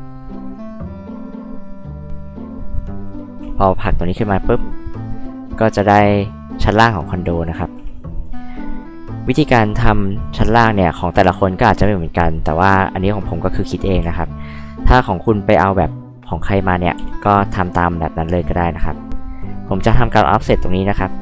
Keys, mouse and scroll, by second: 0.5 click, 1.0 click, 1.8 click, 2.7-3.2 drag, 3.8-5.2 drag, 7.7 h, 7.9 drag, 14.0 space, 16.9 f, 18.4 click.